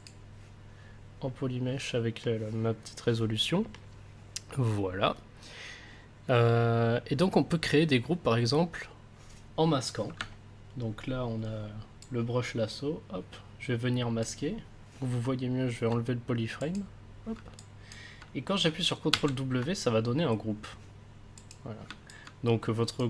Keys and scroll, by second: 19.1 ctrl+w.